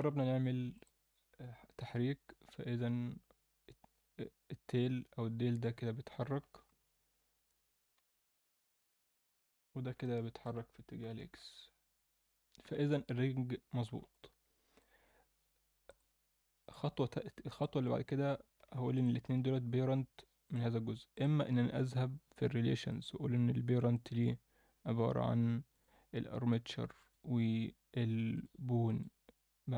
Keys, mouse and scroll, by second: 0.7 click, 1.8 g, 7.9 g, 9.2 click, 10.0-10.4 alt+middle drag, 11.0 g, 14.1-14.8 middle drag, 15.8-16.7 drag, 17.5 click, 18.9 shift+click, 20.4 click, 21.1 click, 22.2-22.9 scroll down 1, 22.9 click, 23.2-23.9 scroll down 1, 23.9-25.8 drag, 23.9 scroll down 1, 27.0-28.4 drag, 28.8-29.7 drag.